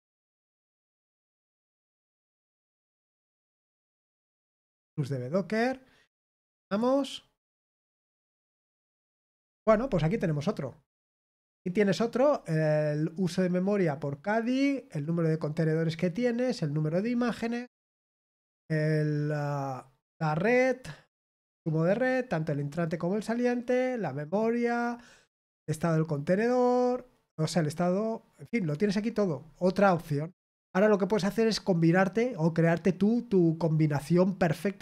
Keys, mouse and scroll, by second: 1.0 click, 2.1 click, 3.3 click, 6.0-7.1 drag, 7.4 click.